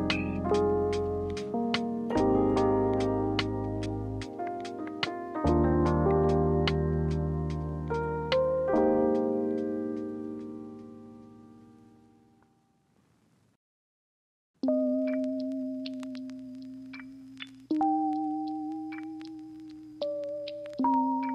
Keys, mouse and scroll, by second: 4.7 ctrl+z, 13.9 ctrl+z, 20.7 ctrl+z.